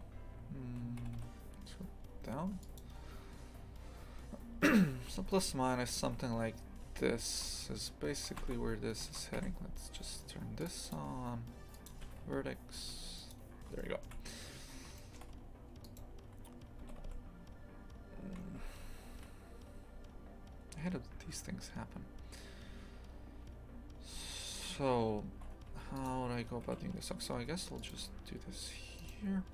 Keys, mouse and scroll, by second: 1.0 g, 5.0 1, 5.3 right click, 5.9 g, 10.6-12.7 drag, 12.7 g, 13.8 shift+middle click, 14.5-15.0 scroll up 1, 15.0 shift+middle click, 15.8 right click, 16.8 g, 25.7 1, 26.0 right click, 26.6 g, 29.0 right click.